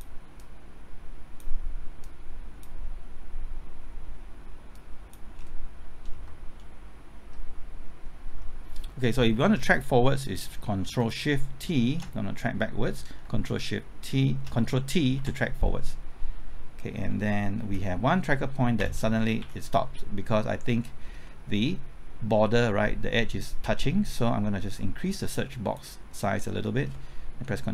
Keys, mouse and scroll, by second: 5.4-5.8 scroll down 1, 11.8 ctrl+shift+t, 15.1 ctrl+t, 17.6 Left, 18.8 Right, 19.4 Left, 20.8 scroll up 1, 21.3 middle click, 21.8-24.7 scroll up 1, 24.8 click, 27.5 typing.